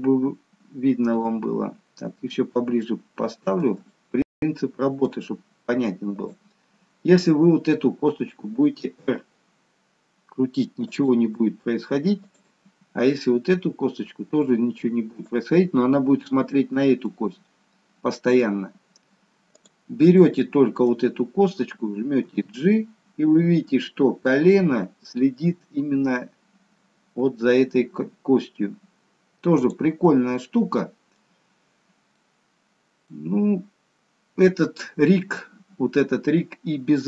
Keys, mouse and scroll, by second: 1.4 click, 1.9-3.3 scroll up 1, 3.3 shift+middle click, 3.3 scroll up 2, 4.0 middle click, 7.1 click, 8.9 r, 12.4 click, 12.6 r, 16.9 scroll up 1, 17.1 middle click, 19.5 click, 20.2 middle click, 22.1 g, 30.0 middle click, 31.3-32.0 scroll down 2, 32.0 middle click, 33.2-33.8 scroll down 1, 33.8-34.5 scroll down 1, 34.5 middle click.